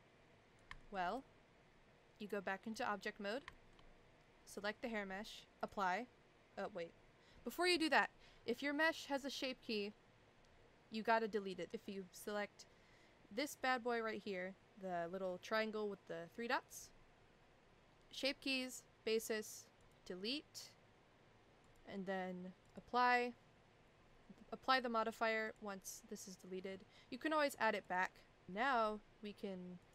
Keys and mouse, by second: 0.8 shift+middle click, 2.2-2.7 drag, 3.5 shift+middle drag, 5.7-6.8 drag, 9.1 click, 19.9 click, 21.6 click, 22.6 click, 25.4 click, 27.9 click, 29.8 click.